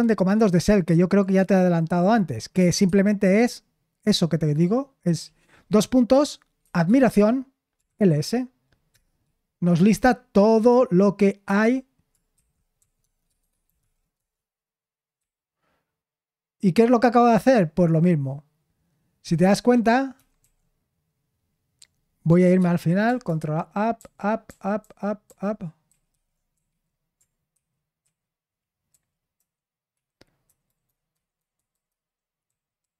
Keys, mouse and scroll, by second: 6.9 typing, 12.3-14.3 typing, 15.9-17.4 typing, 23.2 ctrl+u, 24.0 ctrl+u, 24.5 ctrl+u, 24.8 ctrl+u, 25.9 ctrl+w, 28.0 typing, 28.9 ctrl+w, 29.4 ctrl+w, 29.9 ctrl+u, 30.4 ctrl+u, 30.7 ctrl+d, 32.5-32.8 ctrl+u.